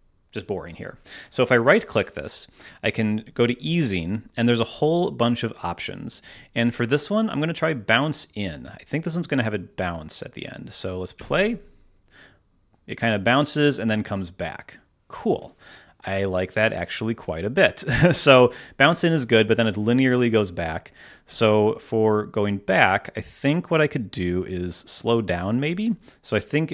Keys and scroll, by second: 11.1 space, 11.8 space, 21.2 space.